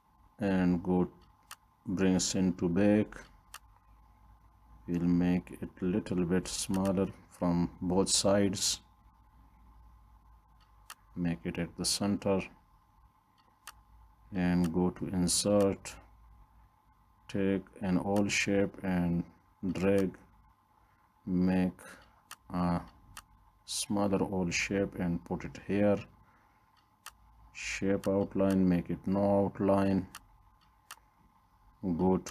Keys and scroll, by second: 8.8 Left, 10.3 Right.